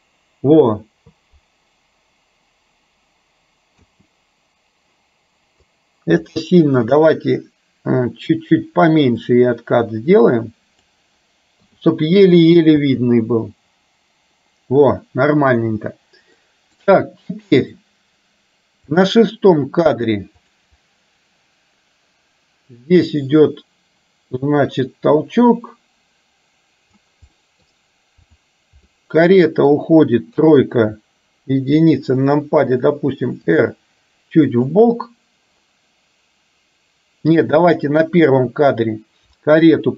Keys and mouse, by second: 3.8 space, 5.8-6.3 drag, 6.9 click, 9.4 click, 9.8-10.9 drag, 11.8 i, 12.9 space, 15.8 space, 16.5 middle click, 19.0 click, 20.5 click, 20.9-27.0 drag, 27.5 middle click, 28.4 drag, 29.0-29.8 middle drag, 30.4 KP_3, 31.8 KP_1, 33.6 r, 37.8 click.